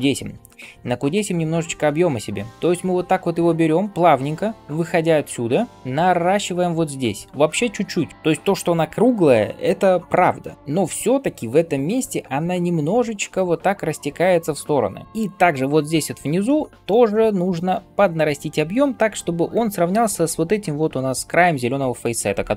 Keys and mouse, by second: 0.3 [.